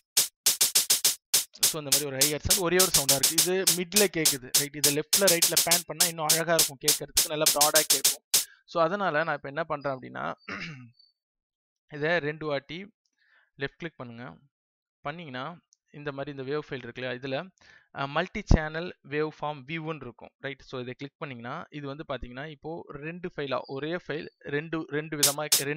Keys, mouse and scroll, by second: 8.8 space, 13.7 click, 16.7 right click, 20.9 click, 25.0 space.